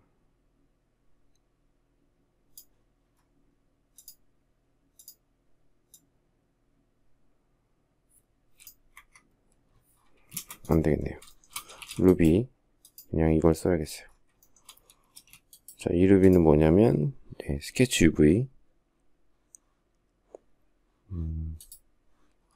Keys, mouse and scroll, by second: 8.5 Escape, 9.9 space, 10.9 shift+middle click, 11.4 shift+v, 14.0 shift+middle click, 14.7 space.